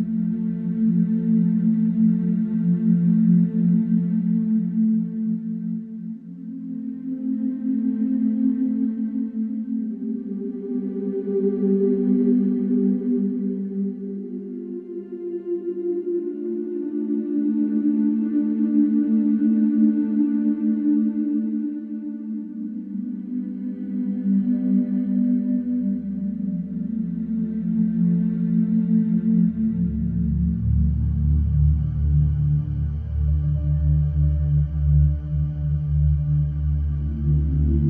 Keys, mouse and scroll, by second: 0.8 click, 2.6 click, 3.2 click, 4.2 click, 7.1 click, 10.1 click, 11.6 Escape, 12.6 scroll, 17.4 middle click, 18.1-18.5 scroll, 18.8-19.9 scroll, 20.9 click, 22.9 click, 24.2 click, 25.2-26.1 scroll, 26.1 click, 26.6-27.9 scroll, 29.2 click, 29.9 scroll, 30.9 click, 31.4-31.9 scroll, 32.9 click, 33.6 click, 33.9 click, 35.6 click, 37.3 click, 37.7 click.